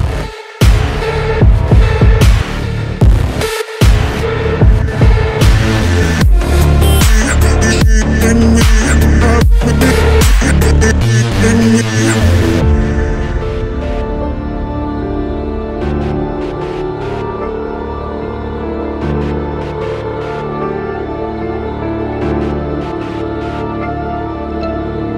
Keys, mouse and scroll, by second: 8.2 alt+scroll down 1, 8.3 alt+scroll up 1, 9.5 ctrl+click, 10.0 right click.